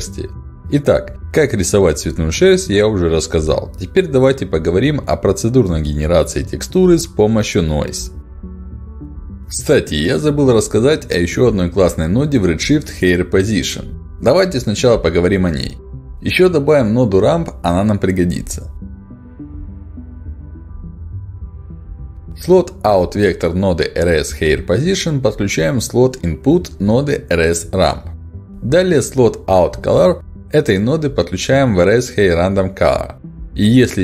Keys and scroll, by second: 12.1 h, 12.1 a, 12.3 i, 12.4 r, 19.6 r, 19.9 a, 19.9 m, 20.2 p.